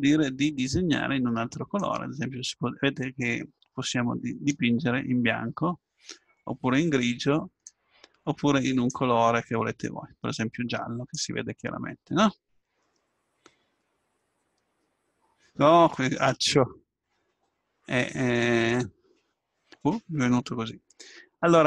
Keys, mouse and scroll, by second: 11.9-21.6 middle drag.